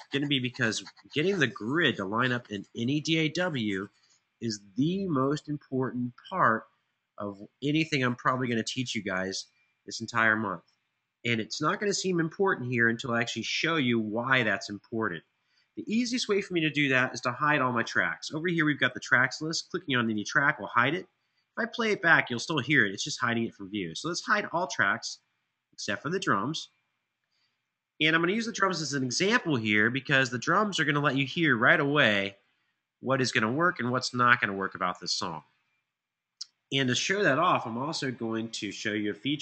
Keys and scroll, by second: 27.9 ctrl+alt+Page_Up, 28.1 ctrl+alt+Page_Up, 38.7 Tab.